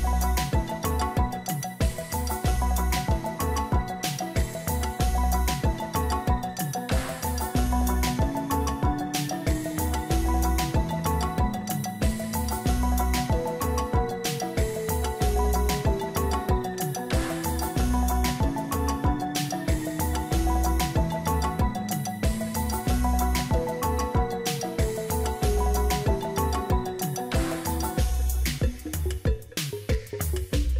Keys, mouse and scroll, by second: 1.0 ctrl+alt+shift+e.